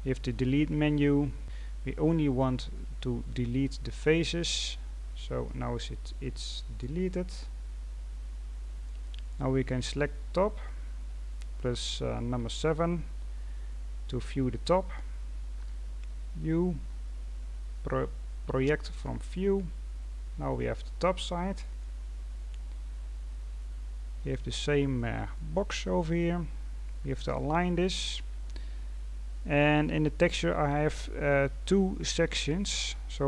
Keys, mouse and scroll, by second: 5.0-5.4 scroll down 2, 5.4-8.4 middle drag, 9.8 right click, 12.3 KP_7, 14.0-14.4 scroll up 3, 14.4 scroll down 2, 16.0 u, 20.1-20.5 scroll down 2, 20.5-22.2 middle drag, 22.2-23.0 scroll up 3, 23.4 scroll down 1, 23.7-24.0 scroll up 3, 24.0-24.6 scroll down 2, 24.6-25.5 drag, 25.5-25.9 scroll down 2, 25.9-26.7 scroll up 7, 26.7-27.4 scroll down 2, 27.4-28.1 scroll up 1, 28.1-29.0 scroll down 2, 29.0-29.4 scroll down 4, 29.4-32.5 scroll up 2.